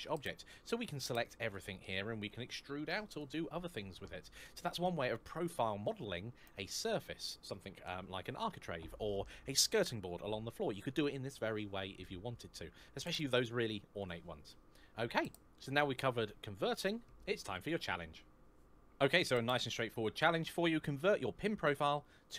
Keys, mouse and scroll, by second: 0.7 a, 1.0 middle click, 2.4 e, 3.0 click, 3.3 middle click.